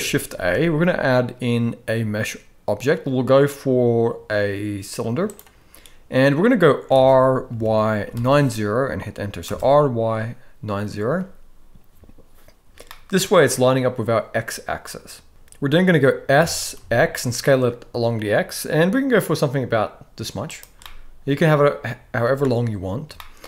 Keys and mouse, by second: 0.3 shift+a, 6.9 r, 12.9-13.4 middle drag, 16.3 s, 20.9-22.4 middle drag, 23.2 shift+middle click.